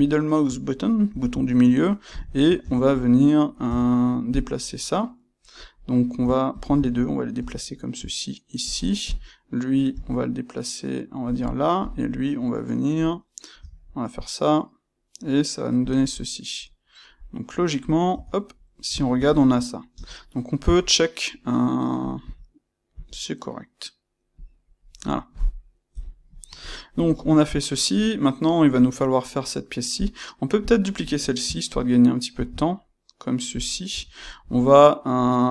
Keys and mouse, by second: 0.0-2.1 shift+middle drag, 1.0 g, 2.1 click, 2.3-4.3 ctrl+middle drag, 2.5 Tab, 4.3 click, 6.5 shift+click, 7.3 g, 9.0 click, 9.9 g, 11.7 click, 13.5 g, 15.8 click, 16.1-24.3 middle drag, 18.1 Tab, 19.9 space, 24.3 click, 25.0-29.9 middle drag, 25.9 KP_1, 29.9 click, 30.5 click, 32.3 shift+d, 33.5 click, 33.9 Tab, 34.4-35.5 middle drag.